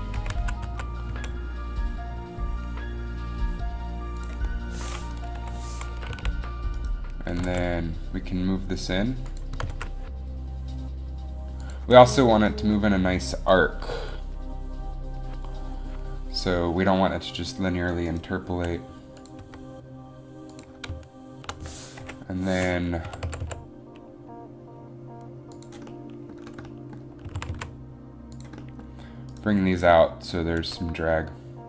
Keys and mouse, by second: 0.3 KP_3, 0.4 z, 0.7 z, 1.3 g, 5.5 g, 5.5 KP_1, 5.5 KP_1, 6.2 a, 7.4 g, 7.5 g, 9.6 g, 14.1 g, 14.2 g, 18.6 r, 19.5 g, 22.1 KP_3, 22.1 KP_2, 23.2 r, 27.4 r, 30.7 r.